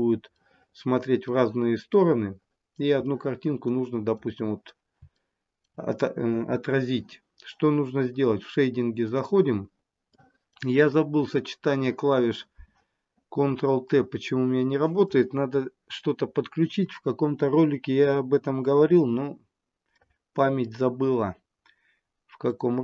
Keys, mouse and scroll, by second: 0.6 middle click, 2.2 middle click, 3.3 middle click, 5.4 shift+middle click, 6.4-8.5 scroll down 2.